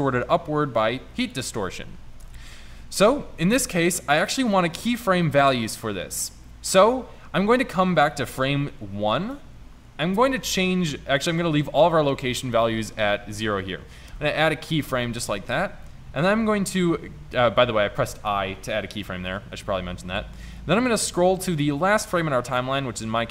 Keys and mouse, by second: 14.2 i.